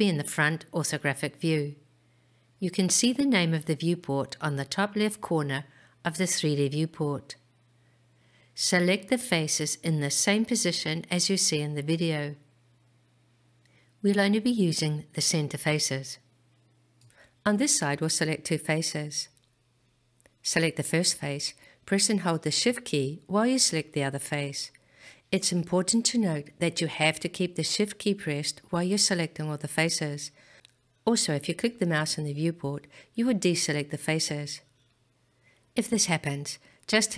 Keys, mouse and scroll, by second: 4.3-5.3 scroll up 2, 21.6 click, 24.3 shift+click, 32.2 click, 35.2 ctrl+z.